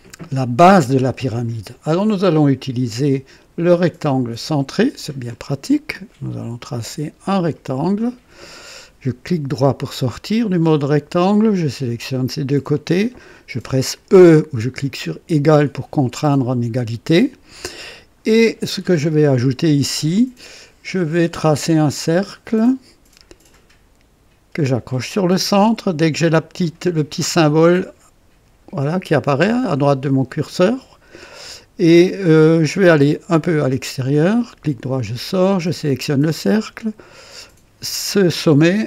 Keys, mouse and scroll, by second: 2.6 click, 4.6 click, 6.7 click, 8.1 click, 9.3 right click, 11.1 click, 12.7 click, 15.2 e, 22.3 click, 30.2 click, 33.1 click, 33.7 right click, 35.3 click, 37.1 click.